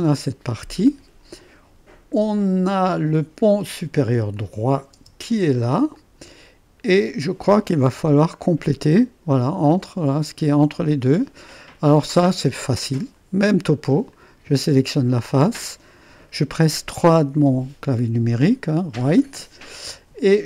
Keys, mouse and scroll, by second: 4.3 click, 4.9 space, 5.9-7.8 drag, 7.8 space, 9.6 middle click, 10.2 click, 11.6-14.9 drag, 17.2 3.